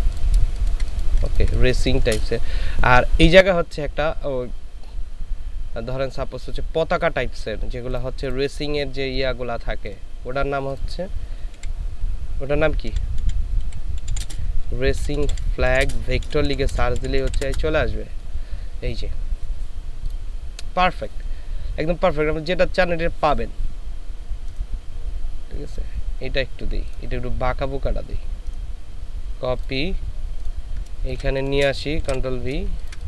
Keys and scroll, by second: 1.2 ctrl+space, 11.8 r, 12.9-17.6 typing, 31.2 ctrl+space, 32.1 ctrl+v, 32.7 ctrl+space.